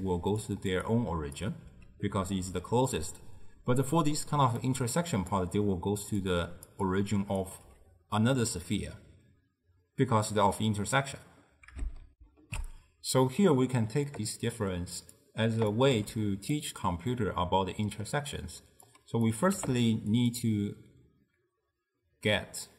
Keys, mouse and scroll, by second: 0.0 d, 0.5 click, 0.7 d, 0.9 click, 1.5 d, 4.4-7.5 typing, 4.7-5.4 drag, 6.3 click, 7.0 click, 9.4 d, 12.2 ctrl+alt+shift+w, 14.2-15.3 middle drag, 15.3 drag, 16.0 g, 17.2-18.9 middle drag, 18.9 click, 19.6 g.